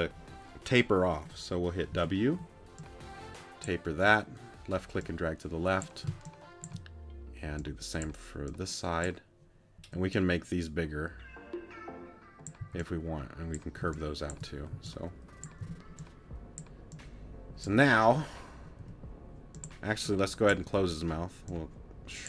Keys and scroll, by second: 1.9 w, 6.1 space, 9.8 w, 12.6 c, 13.8 space, 14.7 c, 18.8 t.